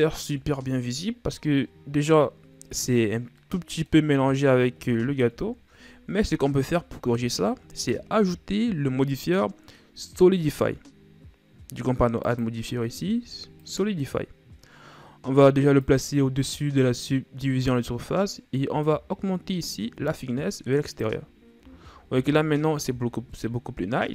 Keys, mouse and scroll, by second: 0.3 KP_1, 2.2-3.4 scroll up 2, 3.4-5.3 middle drag, 5.3 KP_1, 7.4-10.2 shift+scroll up 5, 12.2-15.2 drag, 15.8-18.8 drag, 18.8-21.7 drag, 21.7-22.1 shift+scroll down 3, 22.1 a.